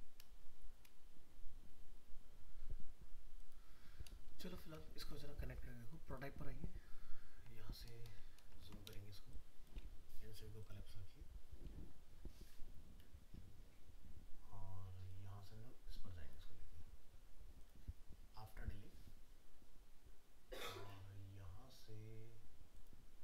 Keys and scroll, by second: 4.3 ctrl+-.